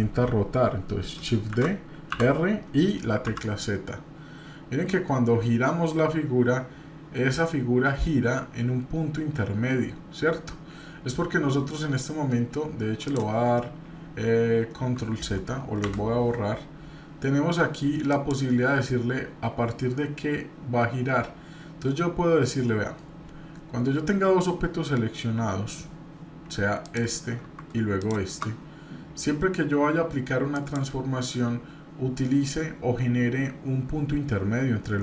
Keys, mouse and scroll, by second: 1.5 shift+d, 15.8 Delete, 18.1-26.2 drag, 26.8 click, 28.0-28.4 shift+drag, 30.5-35.0 drag.